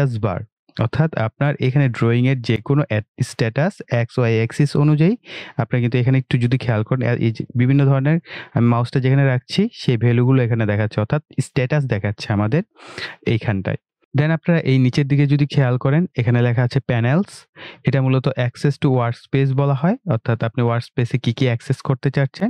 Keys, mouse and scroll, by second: 14.0 click.